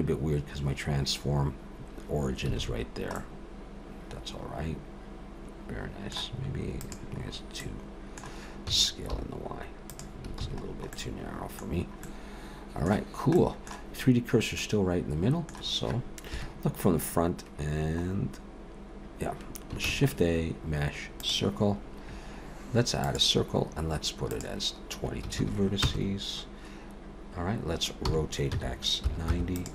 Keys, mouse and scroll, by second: 2.6 alt+a, 2.8-3.2 scroll down 2, 3.2 middle click, 6.8 click, 7.2-7.8 scroll up 3, 7.6 middle click, 8.7 s, 10.4 alt+a, 10.9 middle click, 10.9-11.6 scroll down 3, 11.7-12.3 scroll down 2, 12.0 middle click, 13.4 middle click, 14.6 middle click, 16.3 KP_1, 18.1-18.5 scroll up 2, 19.8 shift+a, 23.2 click, 24.3 click, 25.4 2, 28.1 r.